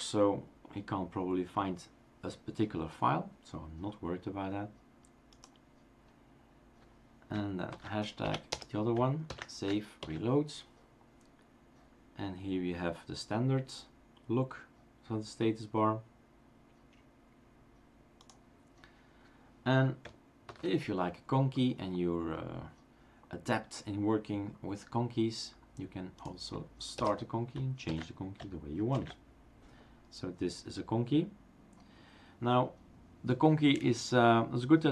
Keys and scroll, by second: 7.7 #, 8.2 Up, 8.5 BackSpace, 9.2 ctrl+s, 10.0 shift+super+r, 10.5 ctrl+shift+super+r, 20.5 #, 27.0 BackSpace, 27.8 ctrl+s, 29.0 shift+super+r, 29.6 ctrl+s, 29.6 shift+super+r, 29.6 BackSpace.